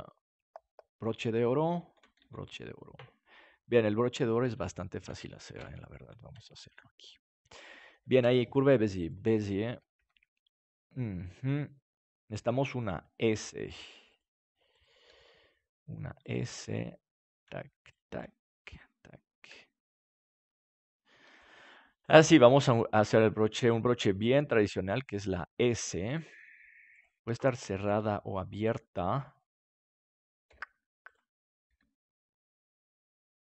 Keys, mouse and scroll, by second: 2.1 ctrl+s, 3.7 click, 5.5 KP_Decimal, 9.0 click, 9.9 Tab, 10.7-12.3 right drag, 12.3 g, 14.2 click, 14.7 right click, 15.0 g, 15.9 click, 16.2-17.7 right drag, 19.4 g, 19.6 right click, 20.7 click, 21.1 g, 23.0 g, 24.2 g, 26.1 click, 26.9-28.7 right drag, 28.7-29.7 drag, 29.7 right click, 30.4 g, 31.1-33.0 right drag, 31.6 g.